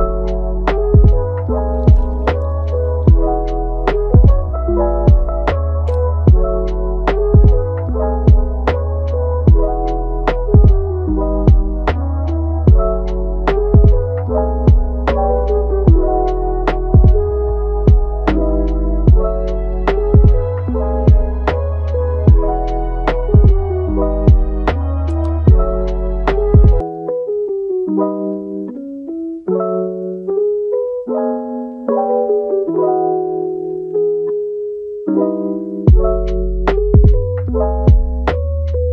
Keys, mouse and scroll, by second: 1.9 click, 2.3 scroll down 1, 2.4 middle click, 2.9-3.2 scroll down 2, 3.2 middle click, 4.1 scroll up 1, 4.2 middle click, 4.8 scroll up 1, 5.0-7.1 middle drag, 7.1 click, 7.9 scroll down 1, 8.1 middle click, 9.1-11.1 drag, 11.1-12.2 middle drag, 12.2 scroll up 1, 12.3-13.7 middle drag, 13.7-15.7 drag, 15.7-16.2 scroll up 1, 16.2 shift+middle click, 17.1-20.2 drag, 20.2 scroll down 2, 20.4-22.5 middle drag, 22.5-23.9 drag, 23.9-25.0 middle drag, 25.0-27.6 drag, 27.6-28.8 middle drag, 28.8 click, 29.3 middle click, 29.9 click, 30.5 middle click, 30.9-31.4 scroll up 1, 31.4-32.4 drag, 32.4 middle click, 33.0-34.2 drag, 34.2 middle click, 34.7 click, 35.2-35.5 scroll down 1, 35.5-35.9 scroll up 2, 35.9 click, 36.5 scroll down 1, 36.7 middle click, 37.1-37.5 scroll up 1, 37.5 click, 37.9 scroll down 1, 37.9-38.9 middle drag.